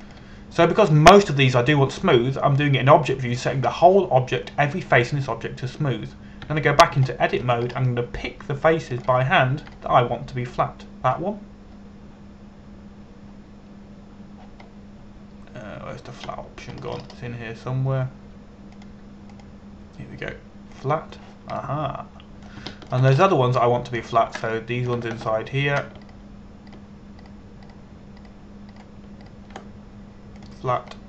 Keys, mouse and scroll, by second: 8.1 Tab, 8.7 shift+middle click, 9.3-10.6 scroll up 1, 10.6 click, 11.3 right click, 16.3 scroll down 1, 18.4 scroll up 1, 20.4 click, 23.3 middle click, 24.3 shift+middle click, 24.8 scroll up 1, 26.2 right click, 27.7 shift+right click, 28.3 shift+right click, 28.9 shift+right click, 29.3 shift+right click, 29.8 shift+right click, 30.4 shift+right click, 30.9 shift+right click.